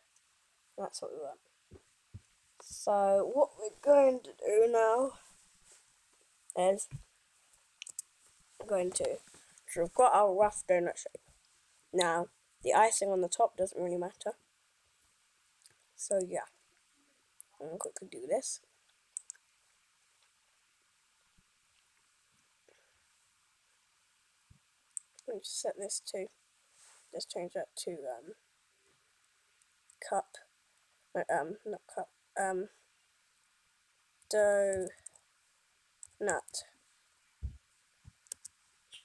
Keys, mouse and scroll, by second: 8.0 KP_0.